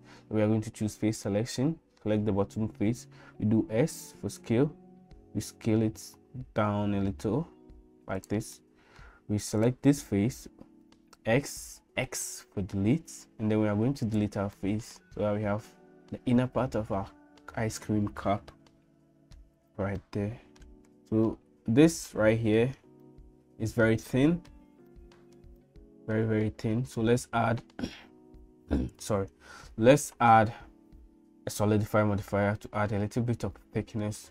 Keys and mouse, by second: 1.3 middle click, 3.5 s, 8.6 middle click, 9.6 click, 11.2 x, 14.6 middle click, 18.0-19.4 middle drag, 20.0 middle click, 21.3 middle click, 23.0 middle click, 24.1 middle click, 25.0 shift+middle click, 25.6 middle click.